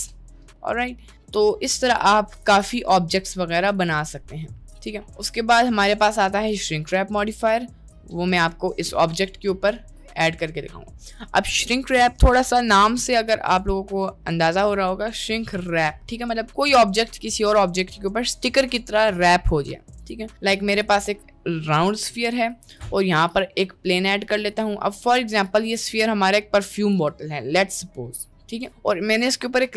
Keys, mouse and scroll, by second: 0.2-1.2 middle drag, 1.3 click, 2.4 a, 2.4 x, 4.8 middle click, 5.9 shift+a, 8.5-10.6 middle drag, 20.5 middle click, 20.8 click, 22.2 middle click, 22.7 shift+a, 24.4 click, 25.5 click, 26.0 middle click, 29.0 middle click.